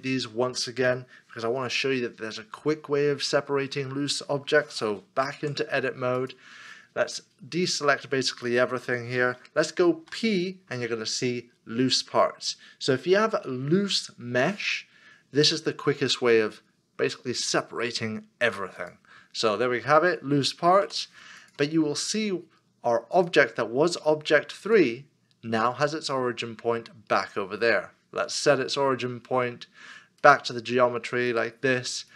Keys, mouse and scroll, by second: 5.4 Tab, 10.0 p, 20.8 Tab, 28.4 Tab, 28.4 right click.